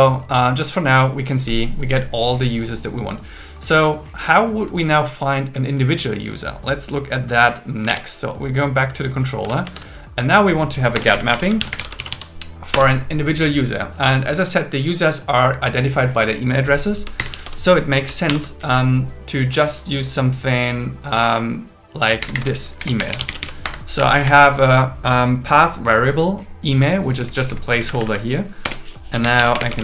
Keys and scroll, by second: 7.8 super+1, 9.4 super+1, 11.0 Return, 11.3 alt+l, 11.6 shift+g, 11.9 shift+m, 12.7 Return, 17.0-18.3 typing, 22.2 alt+8, 22.5 alt+9, 22.8 Left, 23.6 Escape, 24.0 Right, 27.2 Left, 27.7 Right, 28.6 Return, 29.6 space.